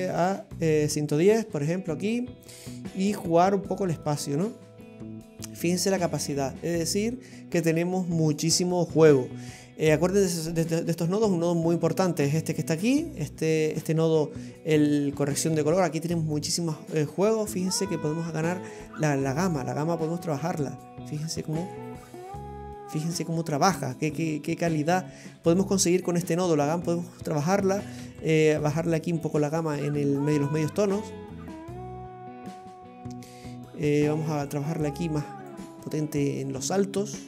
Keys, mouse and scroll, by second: 0.1 click, 5.0-5.5 scroll down 9, 6.3-6.9 scroll down 8, 11.4 scroll down 2, 11.8 middle click, 12.6-14.5 scroll up 10, 14.5 scroll up 2, 16.8-17.2 scroll up 6, 17.6 middle click, 19.6 click, 23.7-25.2 scroll down 6, 25.2 scroll up 3, 28.2 click, 34.5 click.